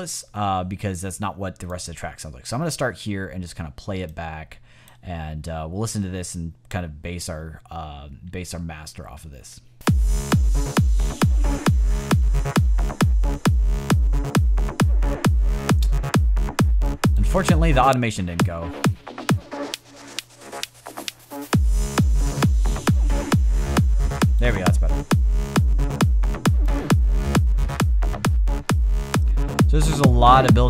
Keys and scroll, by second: 9.6 space.